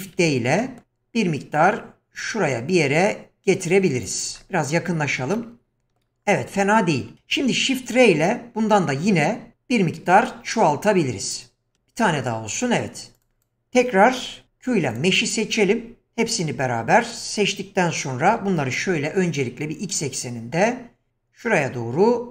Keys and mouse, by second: 0.1 shift+d, 5.3-7.2 shift+middle drag, 8.6 shift+r, 9.0 shift+r, 9.3-11.6 shift+r, 14.4 q, 18.3 g.